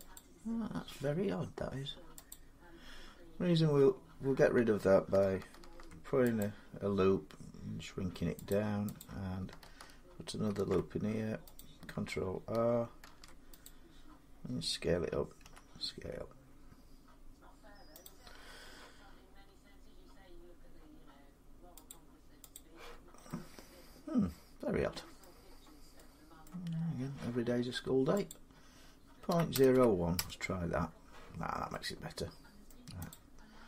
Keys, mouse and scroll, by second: 0.8 Tab, 2.1 click, 3.1 scroll down 3, 5.4 ctrl+r, 6.2 click, 8.3 click, 9.2 click, 10.3 ctrl+e, 11.3 click, 12.8 ctrl+r, 13.4 click, 15.2 s, 17.8 click, 21.7 click, 22.3 click, 25.0 middle click, 25.3 scroll, 25.4 scroll up 5, 26.2 scroll down 1, 28.1 click, 29.1-29.5 typing, 29.9 Return, 31.1 scroll down 5, 31.3 scroll, 32.5 middle click, 32.9 click, 33.3 scroll down 1, 33.3 scroll down 3.